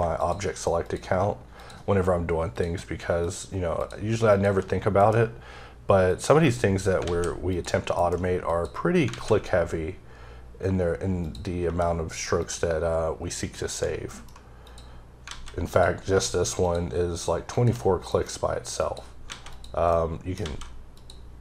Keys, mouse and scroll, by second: 0.9 double click, 1.6 click, 2.6 click, 3.3 double click, 3.8 click, 4.4 click, 5.0 m, 6.1 click, 7.1 a, 7.5 click, 8.0 m, 8.5 click, 9.2 alt+a, 11.3 click, 13.6 shift+double click, 14.1 alt+m, 14.7 click, 15.3 alt+a, 15.7 click, 17.6 shift+double click, 18.2 alt+m, 18.8 click, 19.3 alt+a, 19.5 click, 19.9 middle click, 20.4 a, 21.0 click.